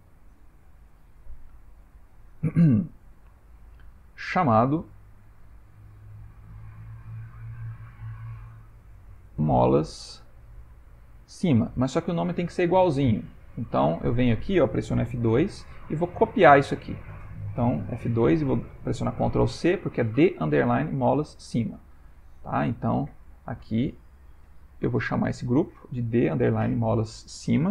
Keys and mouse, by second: 0.7 click, 6.5 click, 6.8 click, 12.8 click, 14.2 click, 15.3 F2, 18.0 F2, 22.7 click, 24.6 click, 24.7 click.